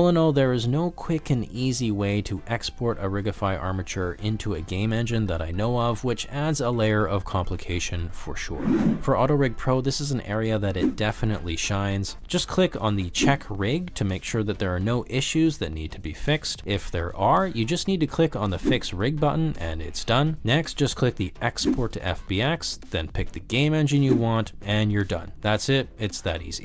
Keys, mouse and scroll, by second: 0.7 g, 1.2 click, 1.6 click, 1.9 middle click, 2.2 g, 3.0 drag, 3.2 middle click, 3.4 g, 4.3 drag, 5.2 shift+middle click, 5.4 middle click, 5.7 ctrl+middle click, 6.0 ctrl+middle drag, 6.2 click, 6.4 shift+middle click, 6.9 middle click, 7.8 shift+click, 8.2 shift+click, 8.5 s, 14.2-18.2 drag.